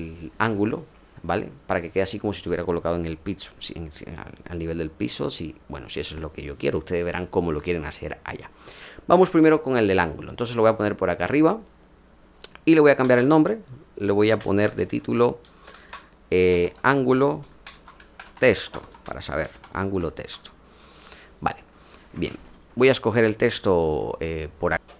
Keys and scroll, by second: 13.0 Return, 14.4 Caps_Lock, 14.5-18.8 typing.